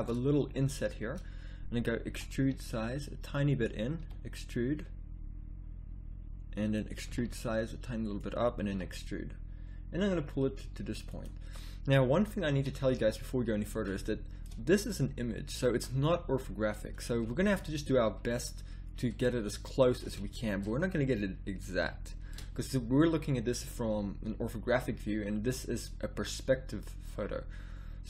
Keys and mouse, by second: 2.1 e, 4.0 e, 7.0 e, 8.7 e, 12.5 a, 17.4 middle click, 18.7 middle click, 19.6-22.0 middle drag, 23.9-28.0 middle drag.